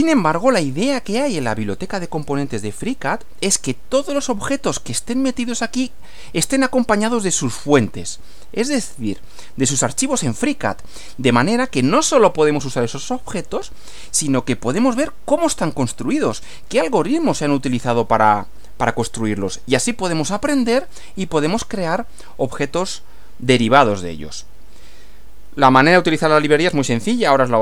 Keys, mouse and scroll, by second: 0.0-0.4 scroll down 2, 6.4 scroll down 2.